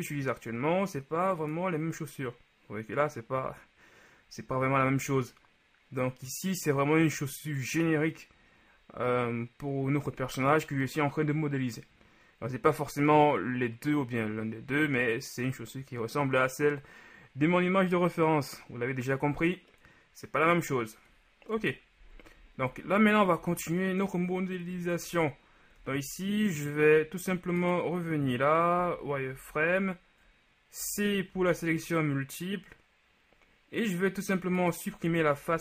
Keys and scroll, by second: 21.7 KP_1, 23.4 z, 24.7 KP_3, 28.8-29.9 typing, 31.4 c, 35.2 z.